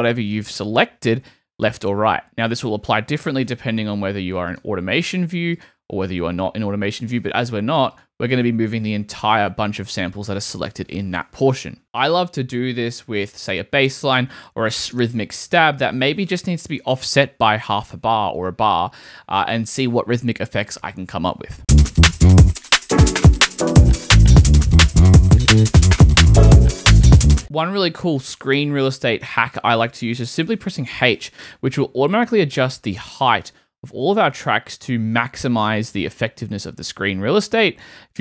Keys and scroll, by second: 1.1 Left, 8.7 Right, 16.6 shift+Right, 17.2 Right, 21.6 space, 27.0 super+z, 27.3 super+space, 30.7 h.